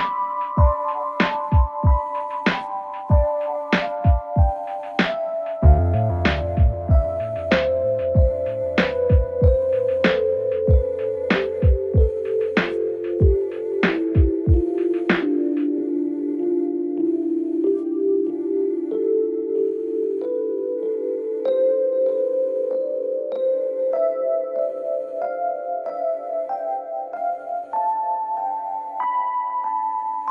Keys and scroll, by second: 6.6 Escape, 13.1 4, 16.9 5, 21.0 ctrl+1, 26.6 3, 27.0 ], 29.1 p, 29.8 c, 29.9 Return.